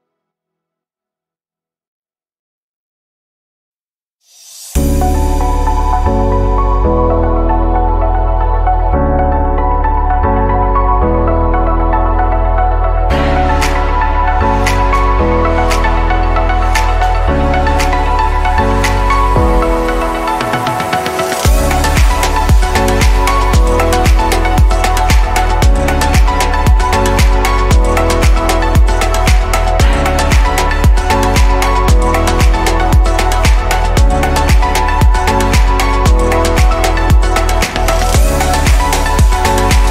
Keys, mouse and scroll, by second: 1.4 click, 3.7 l, 5.3 shift+click, 6.4 l, 7.7 shift+click, 8.8 l, 12.4-12.8 drag, 15.5 Delete, 16.7 scroll down 2, 17.6 click, 19.7-21.7 right drag, 21.7 shift+d, 23.0 click, 26.9-29.1 scroll up 2, 29.1-29.6 scroll up 1, 29.6-30.7 drag, 31.7 l, 38.7-39.5 drag.